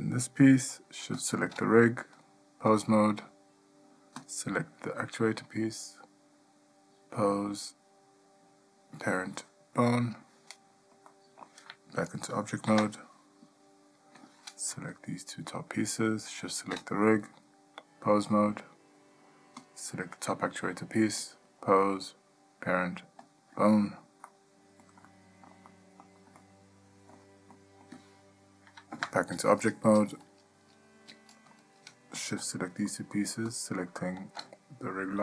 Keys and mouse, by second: 2.4-2.9 drag, 5.7-10.2 drag, 11.3-11.6 ctrl+middle drag, 12.9 Tab, 14.4 click, 16.6 shift+click, 17.6-18.5 drag, 21.5-23.5 drag, 24.4-25.0 middle drag, 25.2-25.7 shift+middle drag, 25.9-26.2 middle drag, 26.6-27.3 ctrl+middle drag, 27.7 middle click, 29.1 Tab, 32.4 shift+click.